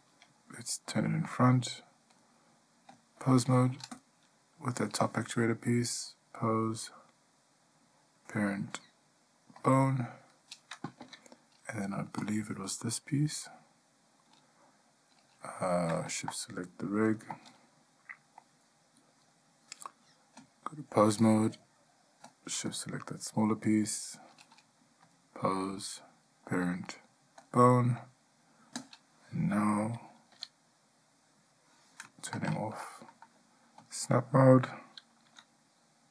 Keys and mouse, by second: 1.1 click, 2.4-3.1 drag, 4.2 click, 6.3-9.9 drag, 11.2 Tab, 12.4 click, 20.7-21.3 drag, 22.9 click, 25.3-27.7 drag, 30.5 g, 34.0 click.